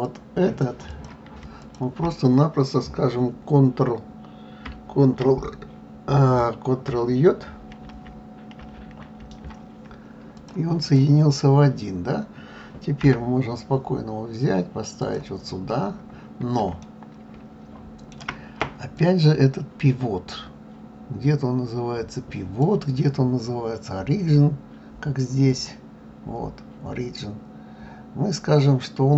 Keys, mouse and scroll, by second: 0.0 click, 0.9 click, 1.6 shift+click, 7.8 ctrl+j, 8.6 ctrl+j, 10.3 click, 10.8 click, 13.0 g, 15.6-16.4 scroll up 3, 16.8-19.0 shift+middle drag, 19.0 click, 25.5-28.5 drag.